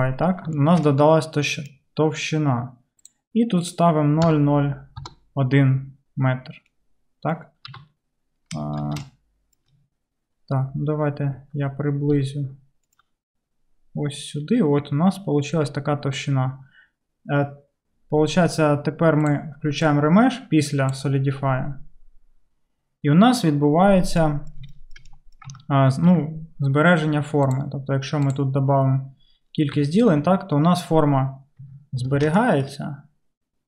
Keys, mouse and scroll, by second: 7.7 q, 24.3-29.2 middle drag, 25.6 Tab, 26.1 Tab, 29.2-33.6 drag, 29.8 Tab, 30.2 Tab, 31.7 Tab, 32.3 Tab.